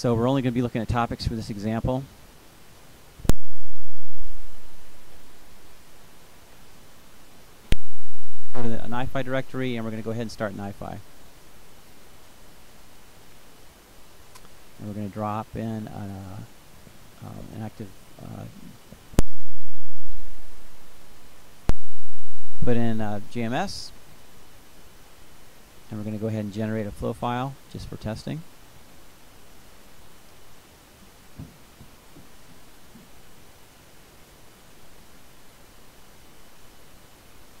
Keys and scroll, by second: 16.7-18.4 typing, 26.5-28.5 typing.